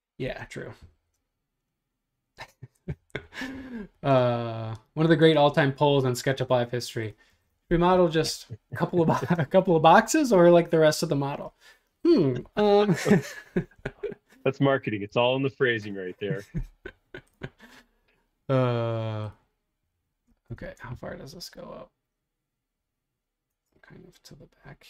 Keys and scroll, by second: 0.8 r, 2.9 Left, 7.3 space, 14.7-15.4 typing, 20.6 super+Tab, 23.5 super+Tab.